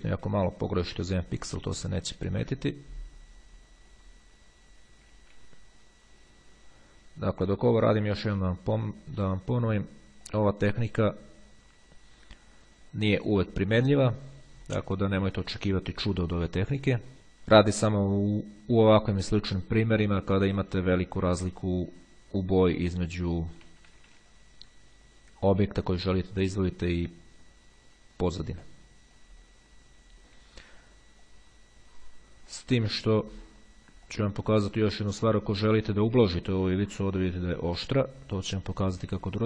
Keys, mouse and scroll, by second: 0.5 [, 1.1-2.3 drag, 2.3 [, 2.9-4.5 drag, 5.3 [, 5.7-9.9 drag, 10.5-17.1 drag, 21.3-22.3 drag, 22.7-24.2 drag, 23.9 ], 24.5-26.7 drag, 26.8-30.1 drag, 30.5 [, 31.1-32.7 drag, 33.1 click, 34.3 click, 35.3 click, 36.3 click, 37.3 click, 38.4 click, 39.2 ].